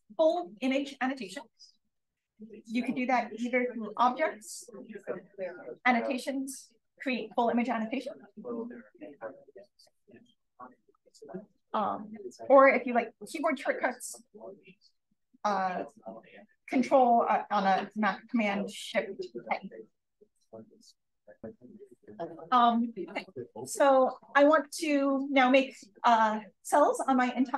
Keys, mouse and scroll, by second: 0.1 click, 2.8 click, 10.7 click, 13.3 click, 13.9 BackSpace, 19.8 shift+super+a, 21.4-22.8 scroll down 1, 21.4 1, 22.8-27.5 scroll down 1.